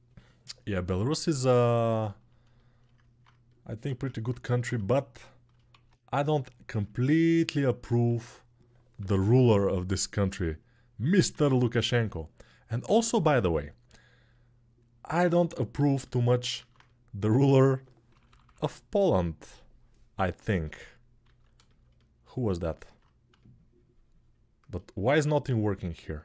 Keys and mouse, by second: 3.6 ctrl+Tab, 4.6-20.3 shift+right drag, 5.5 alt+q, 7.6 alt+q, 8.8 p, 9.1 [, 9.3 [, 11.1 alt+q, 12.6 alt+q, 17.9 ], 18.0 ], 21.0 alt+q, 21.6-26.2 alt+drag, 26.1 a.